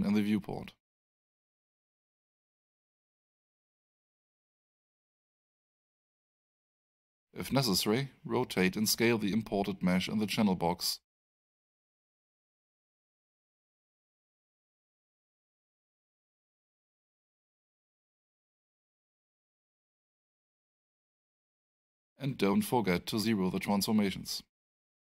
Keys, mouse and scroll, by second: 1.1 alt+right click, 2.3-4.3 drag, 7.4 click, 8.3 click, 9.4-10.8 typing, 10.9 Return, 11.8 Tab, 13.1 click, 14.1-15.4 typing, 15.6 Return, 17.3 click, 18.1 f, 18.8 alt+f, 19.0-20.9 alt+drag, 24.6 click.